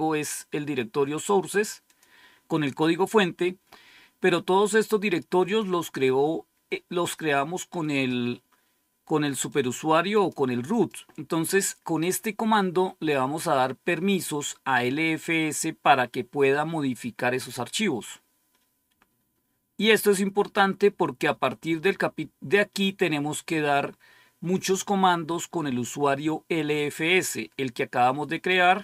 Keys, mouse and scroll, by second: 1.8 click, 2.5 click, 9.4-10.8 drag, 17.3-20.5 drag, 28.6 right click.